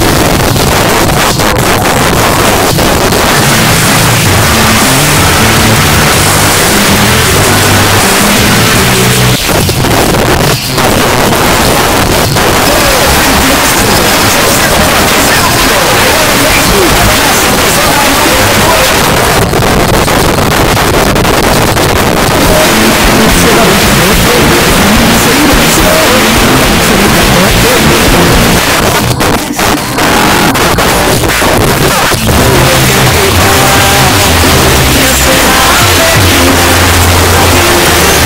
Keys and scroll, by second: 9.4 Page_Down, 18.9 Page_Down, 28.5 Page_Down, 38.2 space.